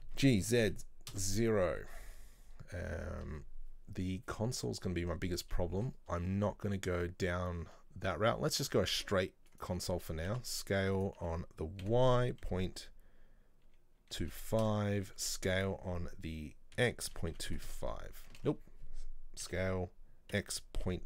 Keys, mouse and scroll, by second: 0.3 g, 1.9-4.9 middle drag, 5.7-8.7 middle drag, 18.5 ctrl+z, 19.5 s.